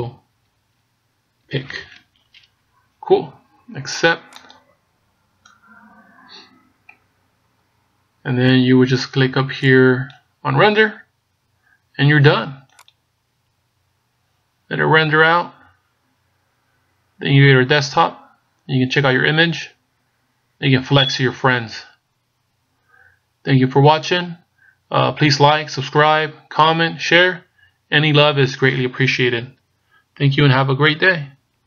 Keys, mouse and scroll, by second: 5.1 click, 9.1-11.2 scroll up 9.